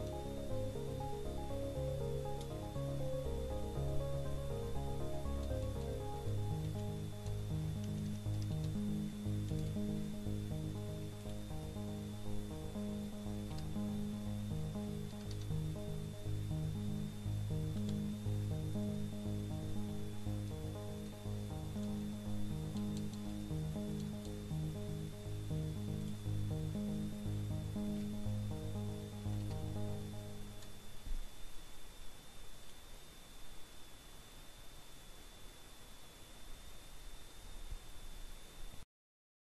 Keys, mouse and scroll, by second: 0.3 alt+F2, 2.0-2.8 typing, 4.8 Return, 7.5 BackSpace, 8.7 c, 9.8-11.5 typing, 13.1 click, 14.9 alt+F2, 15.4-16.3 typing, 17.6 Return, 20.2 BackSpace, 22.7 BackSpace, 26.8 click, 28.5 alt+F2, 29.9-30.9 typing, 33.1 click.